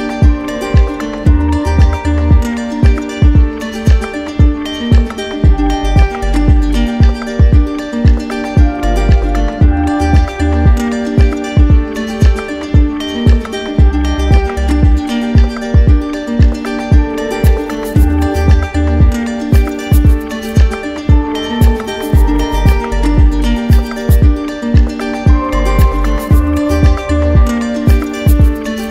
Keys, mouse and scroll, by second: 1.2-2.2 drag, 2.7-3.8 drag, 5.0 click, 7.6 alt+click, 8.3 click, 9.3 alt+click, 11.3 click, 11.8 click, 14.4 click, 16.5 click, 17.2 ctrl+z, 19.0 click, 20.1 alt+click, 21.4 click, 23.1 click, 23.8 alt+click, 26.3 alt+click.